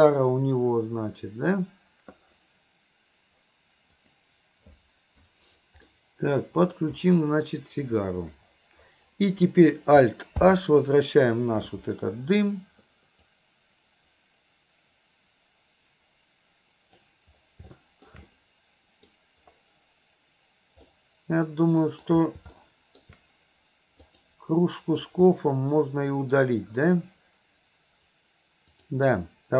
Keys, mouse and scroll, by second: 5.9 middle click, 10.5 alt+h, 13.5-17.2 drag, 17.8-18.1 middle drag, 18.3-19.1 middle drag, 20.9-22.1 middle drag, 22.6-23.1 middle drag, 24.0 click, 25.4-26.4 middle drag, 28.7 click.